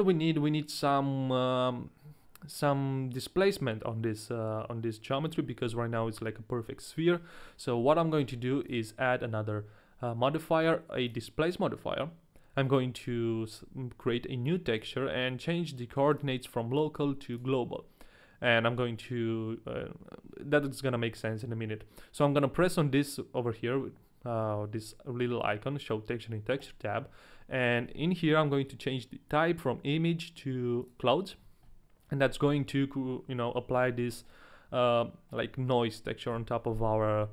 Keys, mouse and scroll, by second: 5.6 KP_1, 8.6 click, 13.0 click, 14.8 click, 16.1 click, 26.6 click, 32.4 middle click, 32.8 scroll up 1, 34.2 middle click, 36.3 KP_1.